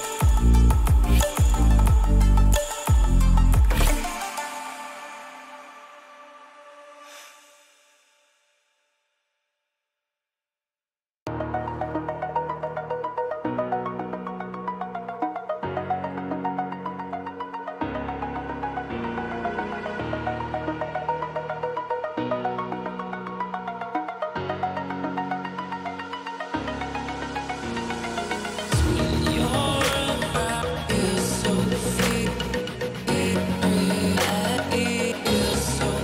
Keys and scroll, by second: 4.7 ctrl+j, 5.0 ctrl+j, 13.7 ctrl+g, 18.4-20.3 typing, 24.9 shift+Right, 25.7 ctrl+=.